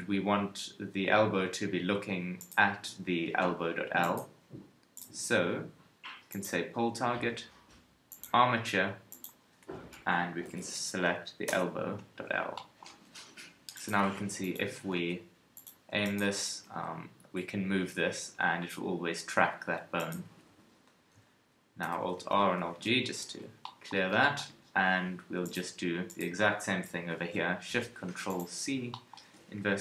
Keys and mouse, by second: 1.1-2.4 middle drag, 13.1 KP_3, 14.0 g, 14.5 KP_1, 14.9 g, 16.5 g, 20.3 a, 20.5 a, 21.8 alt+r, 22.2 alt+g, 22.7 a.